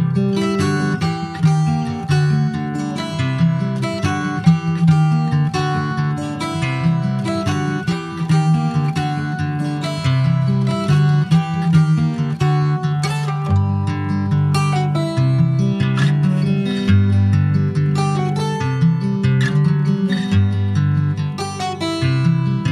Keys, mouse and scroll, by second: 0.1 shift+middle click, 0.7 s, 2.7 r, 5.7 click, 7.6 s, 9.2-9.7 scroll up 3, 10.1 click, 12.0 s, 13.7 scroll down 2, 13.9 middle click, 14.7 ctrl+s, 15.1-16.9 middle drag, 16.9 click, 20.3 scroll down 4, 20.5 middle click, 21.2 click, 21.5 scroll down 4, 21.7 middle click, 22.0-22.7 scroll up 9, 22.4 ctrl+s.